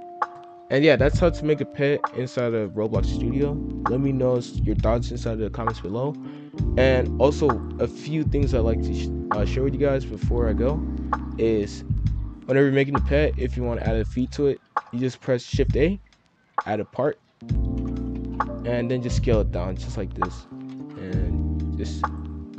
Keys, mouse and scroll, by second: 0.3 F3, 12.1-12.6 middle drag, 12.6 scroll down 2, 12.8 middle drag, 13.1-13.4 scroll up 1, 13.4-14.6 middle drag, 14.6 shift+a, 17.6 KP_5, 17.7 KP_1, 18.0 KP_7, 18.5 g, 19.8 s, 20.5 KP_5, 20.6 KP_1, 21.6-22.5 drag.